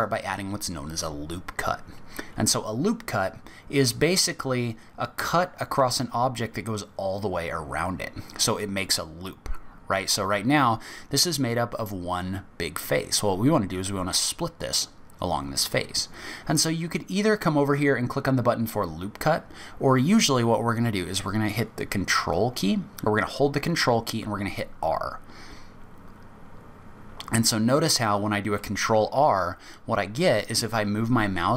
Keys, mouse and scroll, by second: 24.2 ctrl+r.